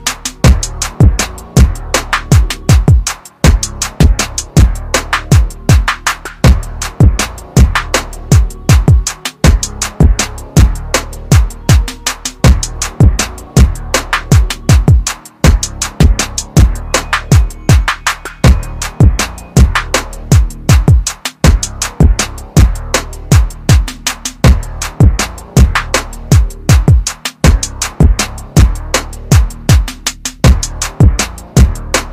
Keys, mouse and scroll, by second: 2.7 click, 6.1 click, 13.6 right click, 17.2 shift+click, 18.6 click, 21.4 space, 22.1 click, 23.5 Delete, 24.6 click, 25.9 shift+click, 28.2 shift+click.